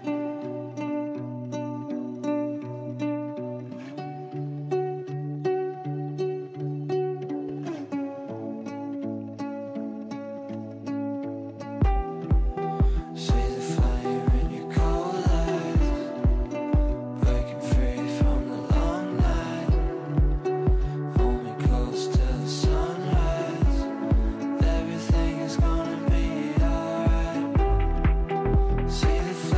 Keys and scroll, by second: 17.2 f, 20.3 shift+F2, 21.5 F9.